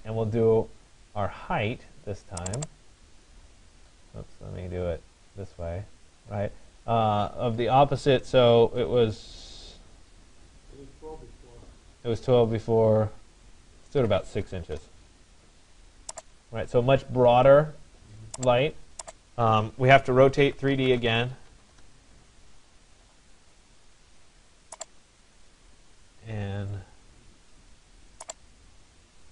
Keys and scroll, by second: 13.7 6, 14.8 Return, 21.2 d, 21.8 Return.